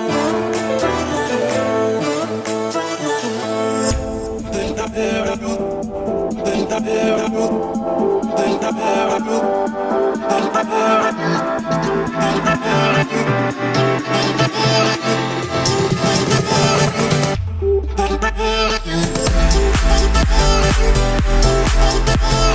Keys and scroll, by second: 7.9 Escape, 8.8 Escape, 10.1 Escape.